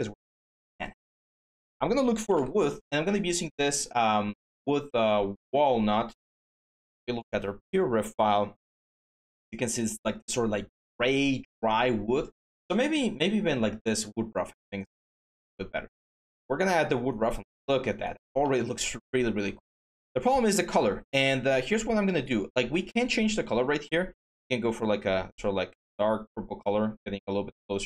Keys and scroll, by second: 1.6-2.6 typing, 5.4 alt+Tab.